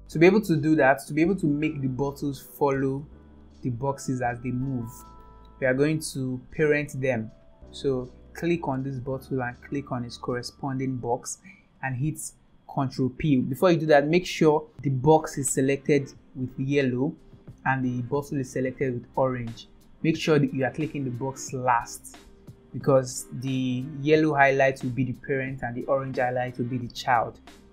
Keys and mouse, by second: 4.6-5.3 middle drag, 8.4 click, 10.2 shift+click.